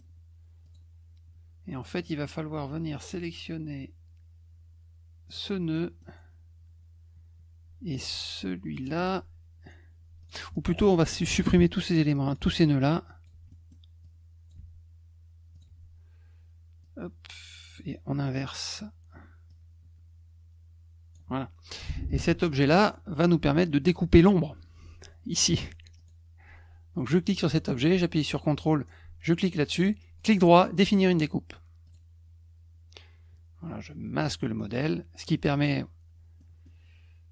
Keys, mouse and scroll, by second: 0.6 click, 2.0 click, 5.3 click, 5.7 middle click, 8.7 shift+click, 10.2 click, 10.5 click, 11.1-12.3 drag, 12.8 click, 13.5 middle click, 14.0 click, 15.5 click, 16.8 click, 19.5-21.1 drag, 22.1 click, 26.0 shift+click, 27.2 click, 28.5 ctrl+click, 30.2 right click, 31.8 click, 34.2 click, 34.7 click, 36.4 middle click.